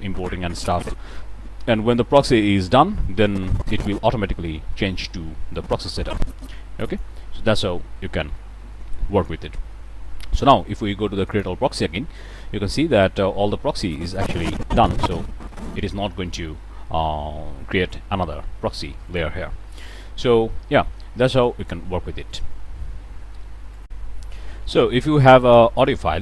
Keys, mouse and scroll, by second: 3.2-4.1 drag, 5.5-7.2 drag, 8.3 click, 11.3 click, 12.9 click, 13.8-15.9 drag, 19.0 click, 21.3 click, 22.2 middle click, 23.8 click, 24.5-24.9 middle drag, 25.7 click.